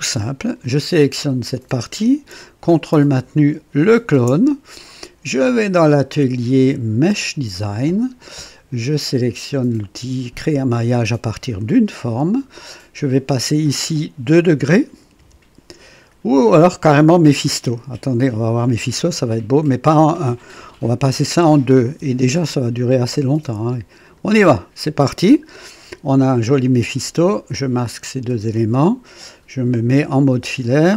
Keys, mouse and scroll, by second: 0.4 click, 3.8 ctrl+click, 5.4 click, 7.0 click, 11.3 click, 13.7 click, 15.2 KP_2, 15.2 KP_2, 17.6 click, 19.1 click, 21.8 KP_2, 22.0 KP_2, 24.0 click, 28.2 space, 28.3 space, 30.4 &.